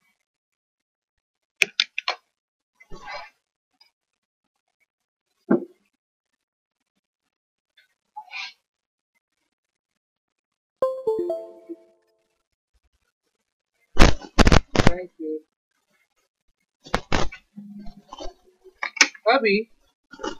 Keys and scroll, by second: 19.0 0.